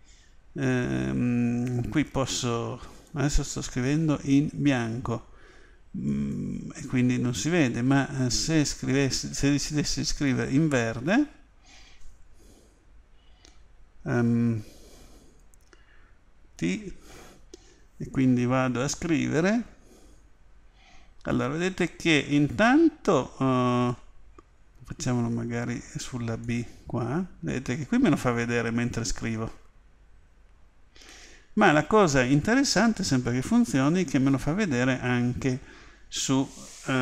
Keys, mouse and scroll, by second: 6.1 click, 10.2 click, 26.5 click.